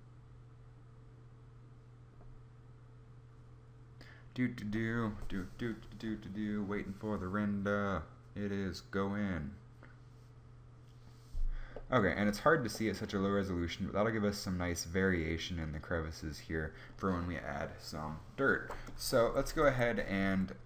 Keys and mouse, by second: 11.4-12.7 middle drag.